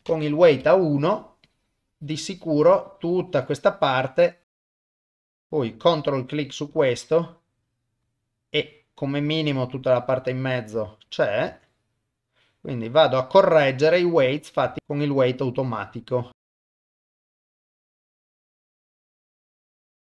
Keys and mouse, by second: 0.0 click, 1.5-5.3 drag, 5.3 f, 6.8-10.6 drag, 11.7-16.8 drag, 17.1 f, 17.2 click, 17.7 click, 18.1 click, 19.2 click.